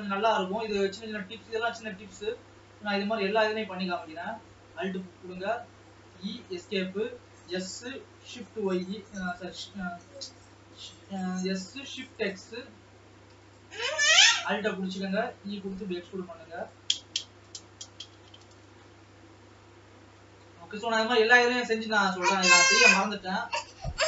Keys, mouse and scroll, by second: 0.0 scroll down 2, 0.3-2.2 middle drag, 2.2-2.6 scroll up 1, 2.6 middle click, 3.1 alt+a, 4.1 alt+click, 4.9 scroll down 2, 5.8 scroll up 1, 6.1 e, 7.4 s, 10.9 s, 14.1 alt+a, 14.4 alt+click, 15.2 e, 17.2-17.8 scroll down 6, 17.8-19.2 shift+middle drag, 19.2 scroll up 2, 19.8 middle click, 20.5 scroll down 2, 20.9 alt+a, 21.2-22.0 scroll down 1, 22.0-22.6 scroll down 6, 22.6 middle click, 23.1 scroll up 2.